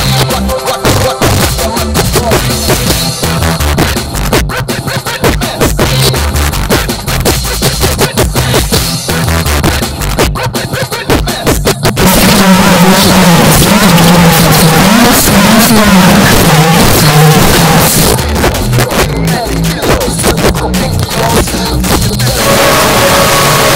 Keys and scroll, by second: 18.1 Page_Down.